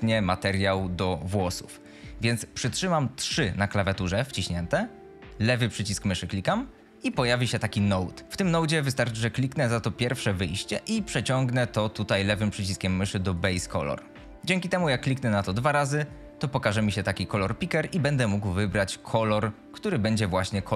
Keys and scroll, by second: 3.1 3, 5.7 3.